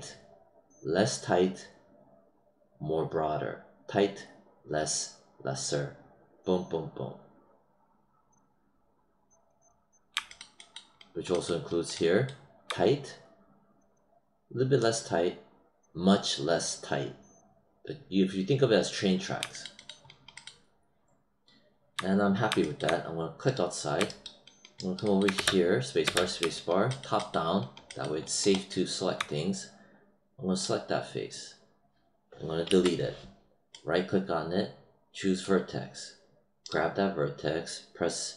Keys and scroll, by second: 25.3 space, 32.6 BackSpace.